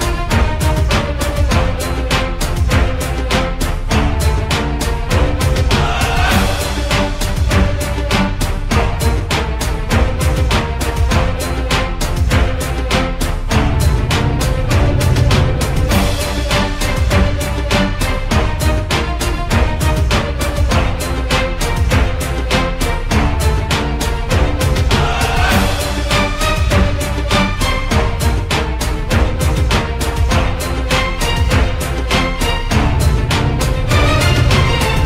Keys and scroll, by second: 10.4-11.9 typing.